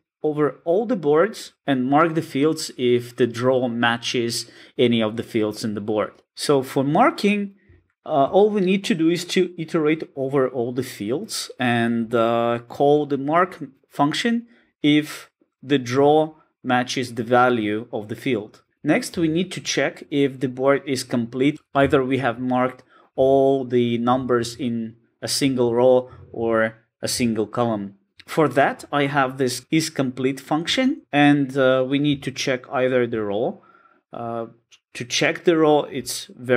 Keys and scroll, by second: 6.2 alt+super+[, 8.3 super+b, 28.1 alt+super+[, 30.6 super+b, 33.1 super+b.